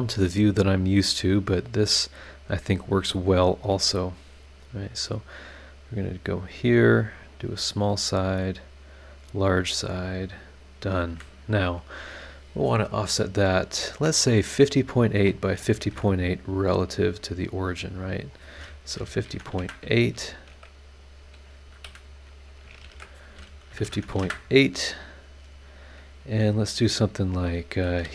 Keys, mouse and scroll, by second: 0.9 click, 3.2 click, 6.0 click, 7.3 click, 9.0 click, 10.4 click, 11.1 Escape, 15.8 shift+v, 16.8 click, 18.2 click, 18.9 KP_5, 19.0 KP_0, 19.3 KP_Decimal, 19.5 KP_8, 19.6 KP_Enter, 21.8 Escape, 22.2 click, 22.8-24.1 typing, 24.2 KP_Enter, 27.2 click, 28.0-28.1 typing.